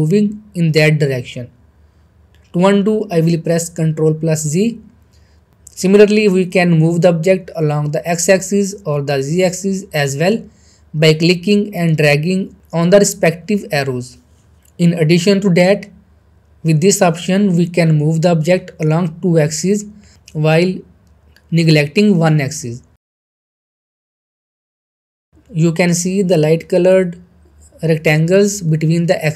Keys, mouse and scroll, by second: 1.4 ctrl+z, 4.1 ctrl+z, 4.1-6.6 drag, 6.8 middle click, 6.8-7.4 middle drag, 8.1 click, 8.1-10.3 drag, 11.1 ctrl+z, 12.2 middle click, 12.3-12.8 middle drag, 14.4-14.8 scroll up 2, 14.8 middle click, 15.1-15.7 shift+middle drag, 17.7-20.8 middle drag, 24.9-25.2 scroll up 1, 25.2-25.8 middle click, 26.3-26.9 middle drag.